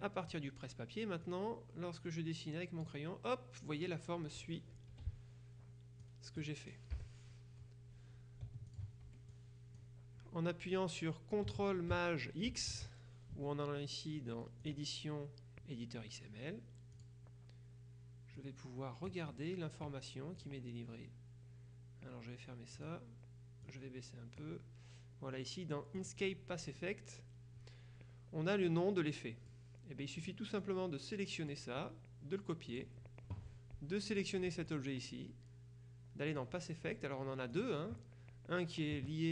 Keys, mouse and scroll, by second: 1.3-3.4 drag, 5.0 F2, 6.1 click, 8.8 ctrl+click, 9.2 ctrl+F1, 9.8 click, 12.6 ctrl+shift+x, 14.7 click, 17.0 click, 18.4 click, 20.4 click, 22.8 click, 23.7 click, 26.1 click, 28.8 click, 30.3 click, 31.9 right click, 32.8 click, 34.2 click, 36.4 click, 37.6 click.